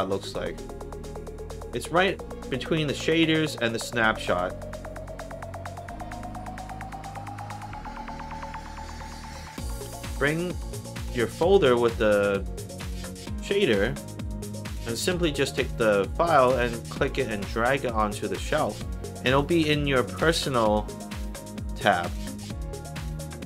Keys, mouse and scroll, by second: 7.4 click, 10.3 click, 13.0 click, 14.2 click, 16.4-18.5 drag.